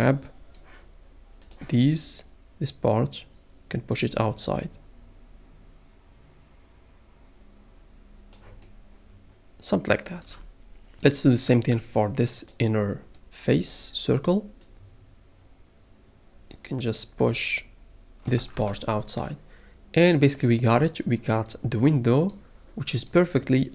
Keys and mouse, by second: 2.6 click, 18.6 Tab.